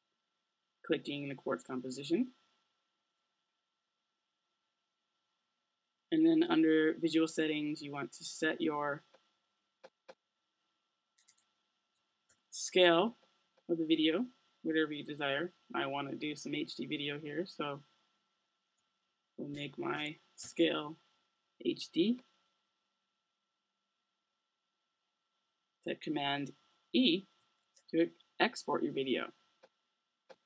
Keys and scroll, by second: 11.0-12.8 typing, 18.7-20.9 typing, 27.3 super+e.